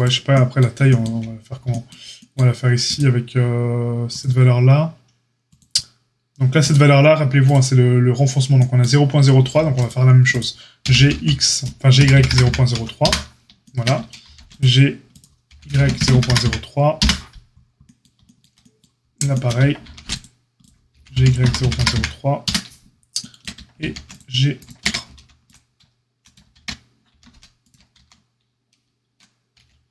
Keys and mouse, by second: 2.8 click, 2.9-4.0 middle drag, 4.0-7.4 drag, 7.4-29.9 middle drag, 9.4 ctrl+r, 10.8 g, 14.2 ctrl+r, 15.4 g, 19.8 ctrl+r, 20.9 g, 23.8 ctrl+r, 24.8 ctrl+z, 25.1 ctrl+e, 26.5 ctrl+z, 26.5 ctrl+a, 27.0 ctrl+r, 27.9 ctrl+z, 29.5 g.